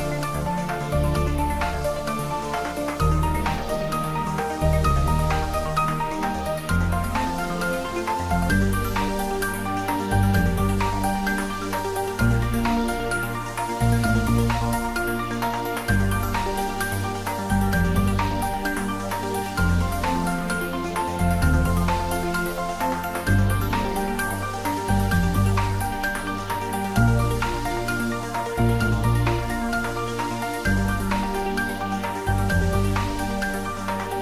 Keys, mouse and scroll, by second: 3.8-4.3 scroll down 1, 4.3 middle click, 5.2 ctrl+r, 6.9 click, 9.7 click, 10.4-11.0 scroll down 1, 11.0 middle click, 11.7 scroll down 1, 12.7-14.2 middle drag, 14.2 ctrl+r, 15.8 click, 19.6 click, 19.9 scroll up 1, 21.7 Tab, 22.6 click, 24.2 Tab, 25.0 scroll down 1, 25.8-28.9 middle drag, 28.4 Tab, 29.5 ctrl+r, 31.9 click, 32.3 Tab, 33.2 ctrl+r, 33.8 click.